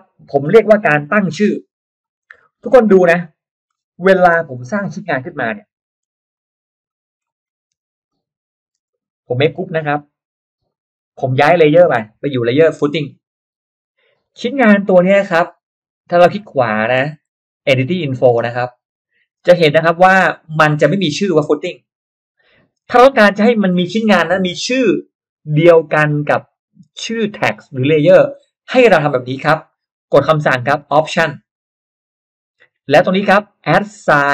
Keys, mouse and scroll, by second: 2.1-2.4 scroll down 1, 2.6-2.9 scroll up 1, 2.7 middle drag, 3.0 click, 3.2 click, 3.6-4.0 scroll up 1, 3.8 middle click, 4.6 middle click, 4.9 Delete, 5.2 middle click, 5.8 middle click, 6.0 r, 6.3 click, 6.8 click, 7.2 middle click, 7.8 p, 8.0 click, 8.2 p, 8.5 click, 8.8 click, 8.8 space, 9.2 click, 9.4 space, 9.6 right click, 10.5 click, 10.9 click, 11.2 click, 13.4 click, 14.6 right click, 15.3 click, 16.6 middle click, 16.6-17.0 scroll up 1, 17.2 right click, 18.0 click, 18.9 middle click, 18.9 scroll up 1, 19.4 middle click, 31.6 click.